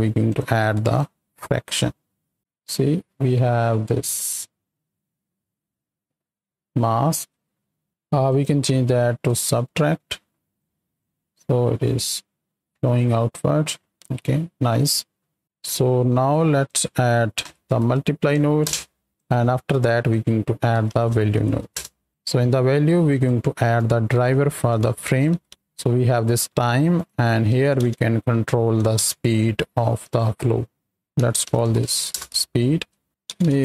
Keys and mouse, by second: 0.3 click, 0.8-7.9 drag, 7.9 ctrl+z, 8.2-9.4 drag, 10.5 click, 10.9-13.7 shift+drag, 14.0 middle click, 14.7 click, 16.3 click, 19.7 drag, 22.2 middle click, 23.1-25.5 drag, 26.9-28.9 drag, 30.0 click, 30.9 shift+F2, 31.7 e, 32.6 space, 33.1-33.6 drag.